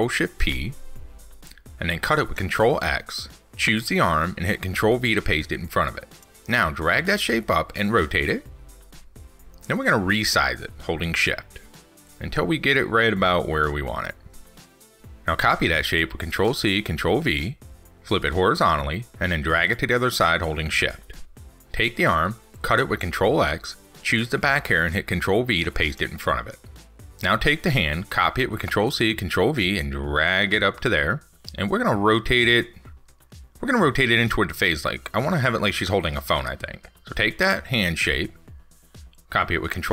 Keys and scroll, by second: 0.8 ctrl+shift+p, 1.8 ctrl+x, 17.4 ctrl+c, 17.6 ctrl+v, 22.5 ctrl+x, 27.0 ctrl+s, 29.0 ctrl+c, 29.2 ctrl+v.